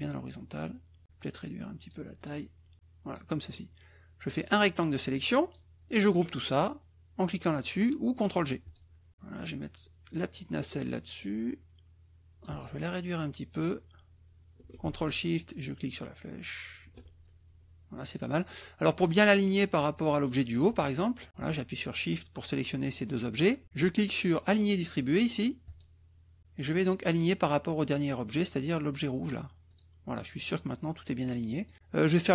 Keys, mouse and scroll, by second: 1.1-2.1 drag, 2.1 click, 2.7 click, 4.2-5.7 drag, 8.6 click, 9.1-12.6 drag, 15.4-16.9 ctrl+shift+drag, 17.2 ctrl+shift+click, 25.6 click, 29.7 click, 31.3 click.